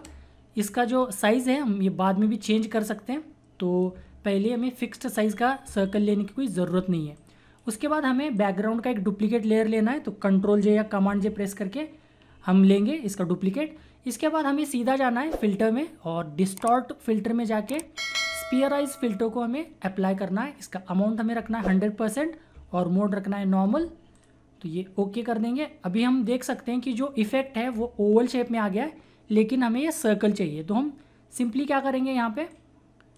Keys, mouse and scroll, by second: 1.4 typing, 6.1 typing, 7.5-10.5 drag, 7.8 typing, 11.1 ctrl+j, 15.4 click, 17.9 typing, 19.0 click, 19.0 typing, 24.1 click, 32.5-33.1 drag.